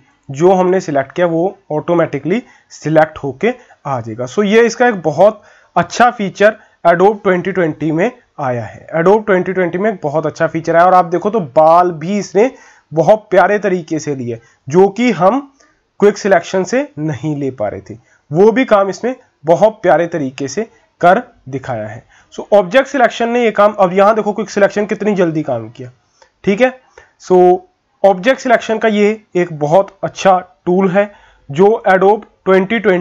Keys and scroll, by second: 21.0 ctrl+-, 21.2 ctrl+-, 30.7 ctrl+-, 30.9 ctrl+-, 31.6 ctrl+=, 31.8 ctrl+=, 31.9 ctrl+=.